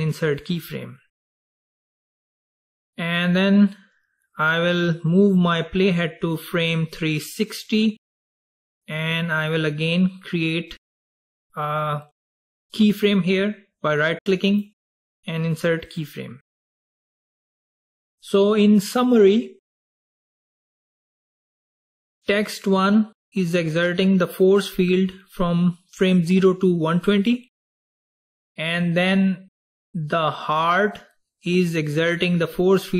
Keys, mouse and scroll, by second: 3.5-6.7 drag, 14.6 right click, 17.3 click, 21.5 click, 22.2 click, 29.8 click, 30.4 click.